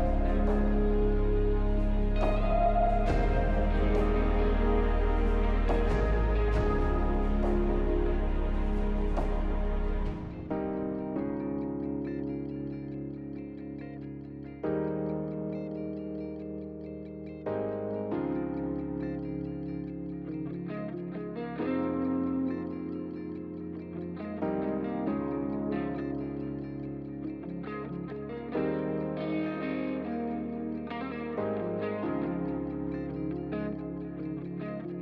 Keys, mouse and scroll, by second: 0.0-0.7 scroll down 1, 0.7-1.5 scroll down 1, 1.5-3.0 scroll down 1, 3.0-4.4 scroll down 1, 4.4-5.3 scroll up 3, 5.3-5.9 scroll up 1, 5.9 scroll up 1, 7.2-8.5 scroll up 2, 8.5 scroll down 1, 9.0-9.8 scroll up 1, 10.7 scroll down 2, 15.2-20.4 scroll up 1, 23.0 double click, 23.7-24.8 typing, 27.7-28.8 typing, 34.1 Return, 34.1 4.